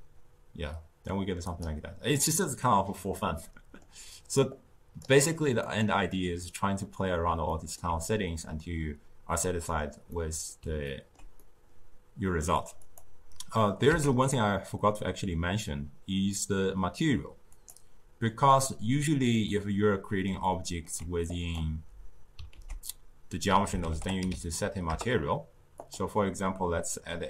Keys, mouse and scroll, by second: 2.1-4.3 middle drag, 4.3 click, 5.6-12.7 middle drag, 12.7 click, 13.8 z, 19.3-21.2 middle drag, 21.2 click, 22.4 ctrl+a, 26.7-27.2 middle drag.